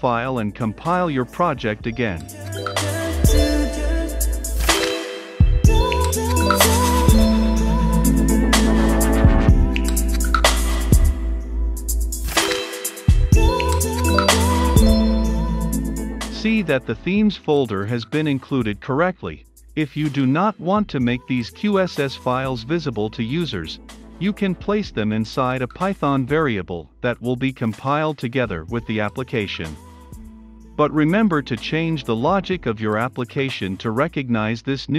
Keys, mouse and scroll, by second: 3.8 ctrl+s, 6.6 Up, 7.3 Return, 7.9 Up, 9.7 Return, 12.4-34.9 drag.